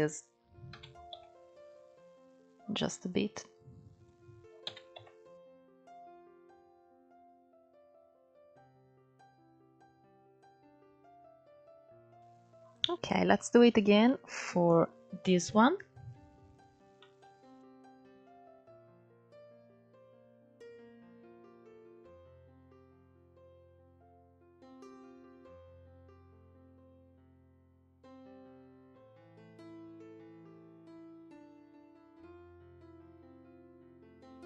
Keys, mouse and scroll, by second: 0.4 s, 3.2 click, 4.3 s, 5.8 Tab, 6.1 scroll down 6, 6.4 alt+z, 6.8 click, 7.1 scroll down 1, 7.2-10.2 middle drag, 11.3-15.6 shift+middle drag, 15.6 KP_1, 16.7 shift+middle click, 16.9-17.2 scroll up 5, 17.2 click, 17.5 Tab, 17.8 shift+middle click, 18.0 scroll up 1, 18.2 ctrl+3, 18.5 click, 18.8 shift+click, 19.3 KP_Decimal, 19.6 scroll down 4, 19.8 middle click, 20.4 shift+click, 20.8 middle click, 21.1 scroll up 3, 21.3-21.8 scroll down 2, 21.8 ctrl+1, 23.2 ctrl+3, 23.4 click, 24.7-25.3 scroll down 1, 25.3 scroll up 2, 25.7 ctrl+1, 25.9 click, 26.3 shift+v, 27.2 click, 27.8 click, 28.1-30.3 typing, 28.6 click, 29.2 click, 29.5 click, 29.8 click, 30.1 click, 30.4 ctrl+3, 30.7 shift+click, 30.9 scroll down 3, 31.0 middle click, 31.3 KP_1, 31.5 scroll up 3, 31.8 click, 32.2 scroll up 1, 32.4-34.4 typing, 34.0 click.